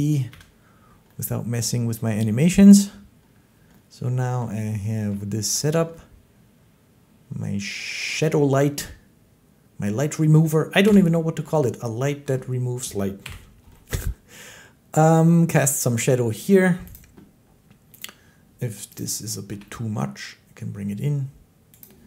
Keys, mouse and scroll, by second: 0.2 1, 2.6 middle click, 4.2 click, 4.9 shift+click, 5.3 shift+middle click, 9.7 middle click, 10.7 7, 12.1 shift+middle click, 13.1 7, 16.8 click, 17.9 click, 18.8 click, 19.3 g, 21.7 click.